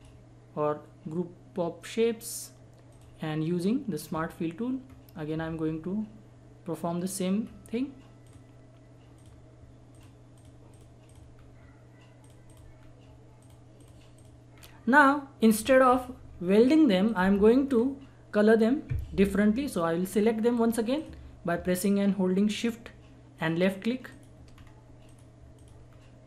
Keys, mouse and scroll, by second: 2.9 click, 4.1 scroll up 1, 7.4-8.2 scroll up 1, 8.2 click, 11.3 scroll down 1, 12.2 click, 12.8 scroll down 1, 13.4 click, 14.5-15.2 scroll down 1, 15.4 click, 17.6 scroll up 1, 18.5 scroll down 1, 20.1 scroll up 1, 20.5-20.9 scroll down 1, 20.9 click, 24.5 scroll up 1, 25.1 shift+click, 25.9 scroll down 1.